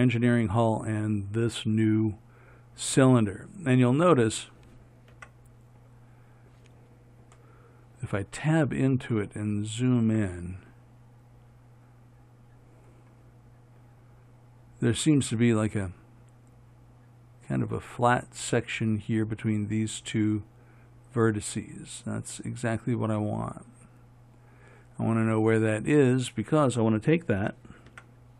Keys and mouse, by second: 1.5-5.4 right drag, 5.4 Tab, 9.3-22.2 middle drag, 28.1 Tab.